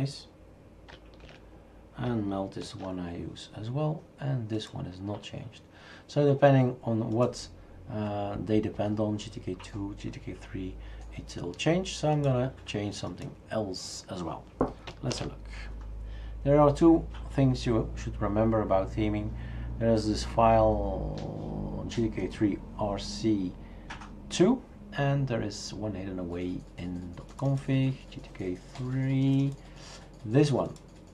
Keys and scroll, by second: 1.2 shift+super+q, 2.6 super+F5, 15.1 shift+super+Return.